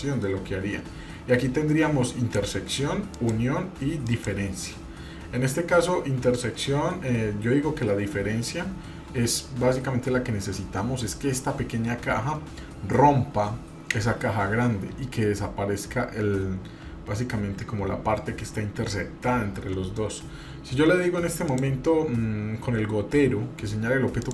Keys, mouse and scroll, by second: 2.1 click, 3.2 click, 4.0 click, 21.5 click.